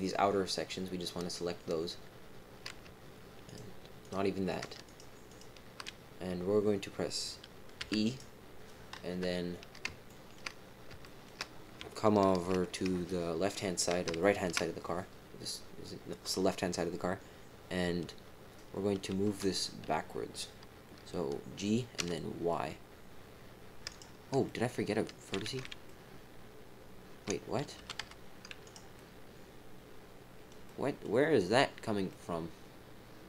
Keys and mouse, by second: 4.0 shift+click, 4.4 shift+click, 4.8 shift+click, 5.2 shift+click, 7.8 e, 9.1 KP_3, 10.0 shift+click, 11.0 shift+middle click, 11.9 shift+middle click, 14.2 shift+middle click, 19.2 g, 24.4 middle click, 25.4 ctrl+z, 25.8-27.2 middle drag, 27.7 g, 28.9-30.4 middle drag, 30.6 middle click, 32.1-33.2 middle drag.